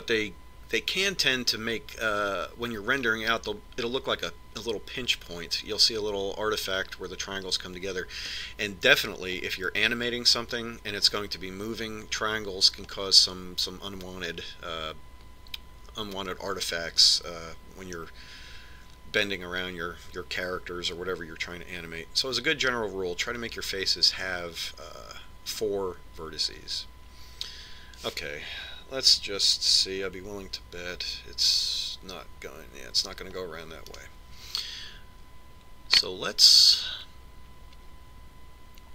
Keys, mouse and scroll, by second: 10.1-11.9 middle drag, 32.9 ctrl+r, 36.0-37.7 right drag.